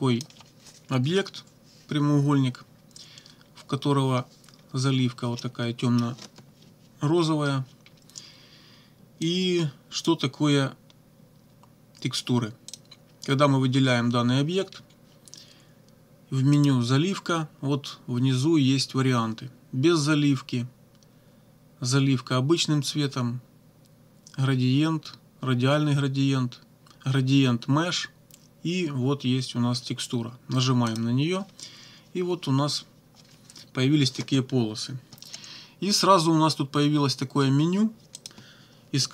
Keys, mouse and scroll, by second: 5.4 middle click, 9.3 click, 12.7 click, 16.5 click, 30.9 click, 38.2 click.